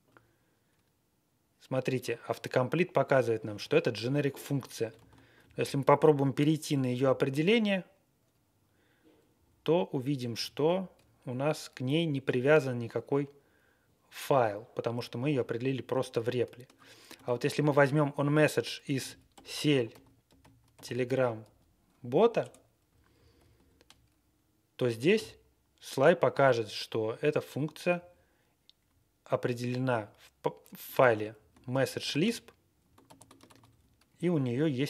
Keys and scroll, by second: 4.9 ctrl+g, 5.3 Left, 5.5 Left, 6.9 alt+., 9.3 Left, 10.5 alt+., 17.1 ctrl+a, 18.6-21.9 typing, 22.4 Return, 22.8 Left, 23.1 Left, 23.5 alt+., 27.9 Down, 28.8 Right, 29.1 Right, 29.1 Right, 29.1 Right, 29.2-30.1 Right, 29.8 Up, 30.9 ctrl+e, 31.3 Left, 32.0 ctrl+space, 32.2 Left, 32.4-32.7 Left, 33.0 ctrl+g, 33.4 ctrl+a, 33.6 Down, 34.0 Right, 34.4 Down.